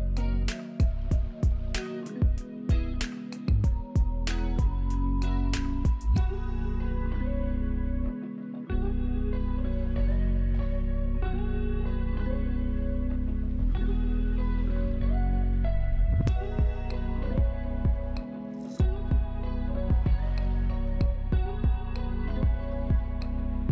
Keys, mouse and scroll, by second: 0.6-1.1 scroll up 2, 1.1 alt+middle click, 5.4 scroll down 1, 5.9 middle click, 6.6-7.0 scroll up 3, 8.5-9.1 scroll down 2, 9.1 middle click, 14.2 alt+middle click, 14.7 F3, 15.3 middle click, 15.9-17.7 scroll up 3, 17.8 scroll down 2, 18.2 middle click, 19.1 middle click, 20.0-20.5 scroll up 2, 20.5-20.8 scroll down 2, 20.9 middle click, 21.8 middle click.